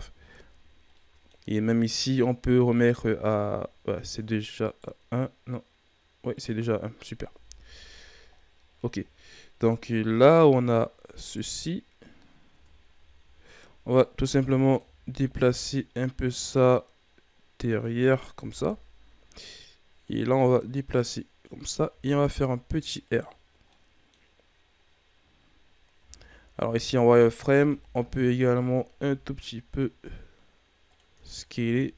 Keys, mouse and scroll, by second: 0.1 a, 0.3-0.9 scroll down 4, 0.9-1.4 middle drag, 1.4 scroll up 4, 2.9-4.6 drag, 4.6 right click, 6.3 click, 7.3 KP_1, 7.6 a, 8.3 scroll down 3, 9.5 KP_3, 10.8 scroll up 4, 11.2 right click, 12.4 Tab, 12.9 a, 13.2 a, 14.0 click, 14.9 ctrl+z, 15.9-18.4 drag, 18.4 KP_1, 20.0-21.8 drag, 21.8 r, 23.7-25.9 middle drag, 25.9 z, 26.9 alt+right click, 27.6 KP_1, 28.0 z, 29.0 s, 31.1 Tab, 31.4-31.9 scroll down 4, 31.6 a.